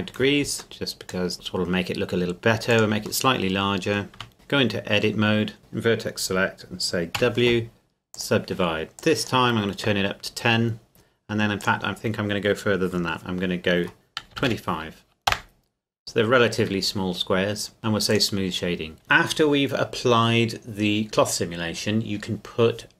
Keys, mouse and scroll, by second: 0.6 middle click, 1.1 click, 1.3 s, 2.7 click, 3.3 middle click, 4.2 Tab, 4.6 scroll up 1, 5.6 click, 7.2 w, 8.2 click, 11.6 click, 14.3 KP_2, 14.5 KP_5, 15.3 KP_Enter, 17.8 Tab, 18.1 click.